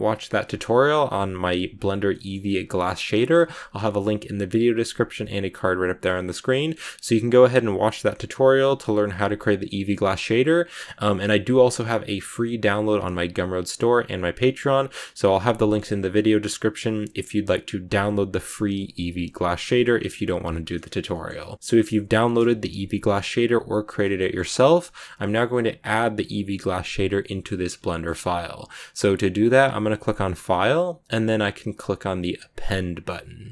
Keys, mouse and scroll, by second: 1.7-2.0 scroll down 1, 2.0-21.6 middle drag, 21.6-22.1 scroll down 2, 22.1 middle click, 23.1-24.0 scroll up 1, 24.0 scroll up 1, 24.1-33.5 shift+middle drag.